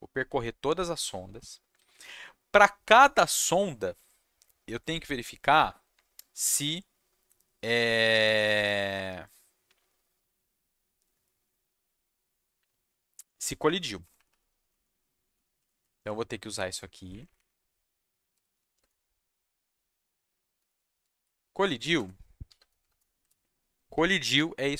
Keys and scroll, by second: 14.0 Down, 14.1 Down, 14.2 Down, 14.7 Right, 15.4 shift+Left, 15.5 shift+Left, 15.8 shift+Left, 16.0 shift+Left, 16.9 ctrl+c, 17.3 Up, 18.0-19.2 typing, 20.3-22.9 typing, 23.2 ctrl+v, 23.9 Left.